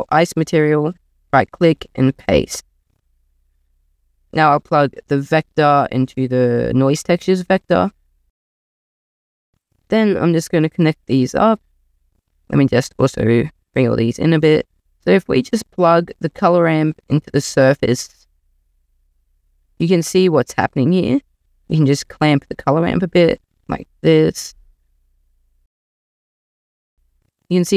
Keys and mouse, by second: 1.0-2.2 drag, 5.4 click, 12.7 click, 13.6 s, 16.3 click, 21.5 click, 22.0-24.2 drag, 24.7 click.